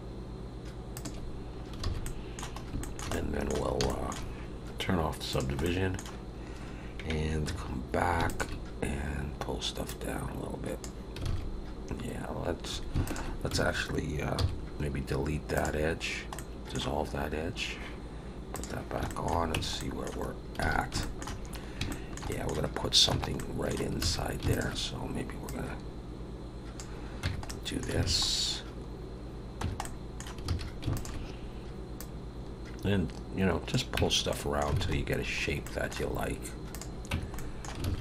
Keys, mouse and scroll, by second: 1.6 scroll up 1, 1.8 alt+a, 2.0 middle click, 2.6 scroll up 1, 2.8 shift+middle click, 3.1 middle click, 3.8 shift+middle click, 5.3 click, 5.6 middle click, 7.4 2, 8.2 alt+shift+click, 9.8 click, 11.2 alt+a, 13.0 alt+shift+click, 14.3 x, 16.3 middle click, 18.5 click, 19.1 shift+middle click, 19.5 Tab, 19.8 middle click, 20.3 scroll down 1, 20.6 alt+a, 21.0 shift+middle click, 21.9 shift+middle click, 22.3 middle click, 23.1 Tab, 23.3 middle click, 24.0 alt+a, 24.5 alt+shift+click, 25.4 click, 27.2 Tab, 27.4 middle click, 28.0 alt+a, 29.6 Tab, 29.8 middle click, 30.5 alt+a, 30.9 alt+shift+click, 31.9 click, 33.9 Tab, 34.3 middle click, 34.7 alt+a, 34.9-35.6 scroll down 3, 35.6 middle click, 36.1 scroll up 2, 36.7 click, 37.1 Tab, 37.3 middle click, 37.8 alt+a.